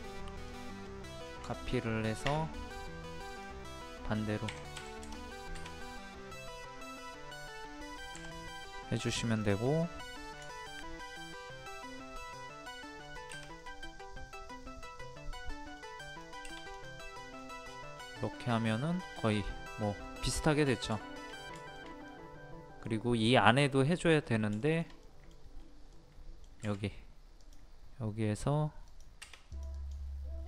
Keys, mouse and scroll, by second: 0.8 middle click, 1.5-2.5 shift+middle drag, 3.3 click, 4.7 KP_1, 6.0-6.5 scroll up 1, 7.0 middle click, 8.1 m, 9.3 click, 12.2 shift+scroll up 1, 13.1 shift+click, 13.6-16.1 middle drag, 16.1 click, 17.1 middle click, 17.3-17.7 scroll down 1, 17.7 scroll up 1, 17.9 scroll down 1, 18.2 middle click, 19.1-19.4 scroll down 1, 19.7 middle click, 20.3-20.6 scroll up 1, 21.0 shift+middle click, 21.6-23.5 shift+middle drag, 24.2-24.6 scroll up 2, 24.6 shift+middle click, 25.5 scroll up 1, 25.9 middle click, 27.4 click.